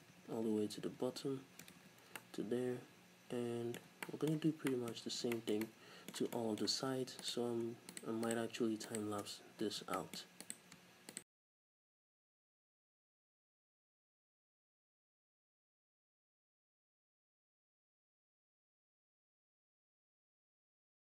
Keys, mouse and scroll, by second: 1.9 ctrl+z, 2.1 scroll down 2, 5.1-5.4 scroll up 2, 8.0-9.3 shift+right drag, 9.9 f, 10.0 middle click, 10.5 right click, 11.2 shift+right click, 11.2 f, 11.4 shift+middle click, 11.6-12.3 scroll up 1, 12.3-15.3 typing, 12.3 right click, 12.7 middle click, 13.1 shift+right click, 13.2 middle click, 13.3 shift+right click, 13.7 shift+right click, 14.0 shift+middle click, 14.2 shift+right click, 14.6 middle click, 15.0 shift+right click, 15.2 scroll down 1, 15.3-16.3 shift+middle drag, 15.4-16.3 scroll up 2, 16.3 shift+right click, 16.6 middle click, 16.7-21.0 typing, 17.1 middle click, 17.1 scroll down 1, 17.3 scroll up 2, 17.7 middle click, 17.8 shift+right click, 18.1 shift+middle click, 18.8 right click, 19.2 shift+middle click, 19.7 shift+right click, 19.8 right click, 20.4 shift+middle click.